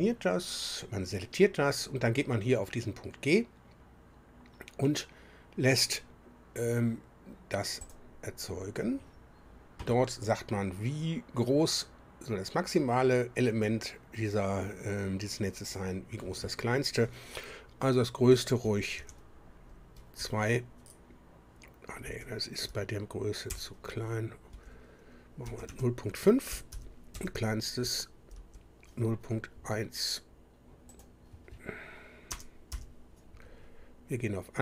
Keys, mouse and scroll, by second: 7.8 click, 15.6 click, 18.3 Right, 18.6 Left, 19.0 2, 20.2 Delete, 22.0 BackSpace, 22.6 Delete, 23.4 KP_0, 24.5 Left, 25.4 Right, 25.6 Right, 26.5 Delete, 26.7 5, 27.1 Down, 28.3 Up, 30.9 click, 32.3 BackSpace, 32.7 1.